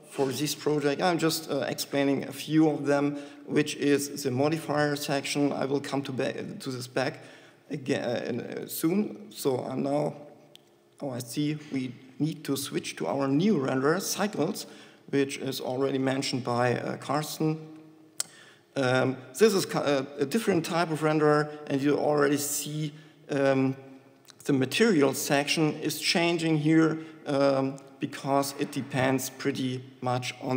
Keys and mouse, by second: 12.8-15.1 drag, 28.1-30.5 drag.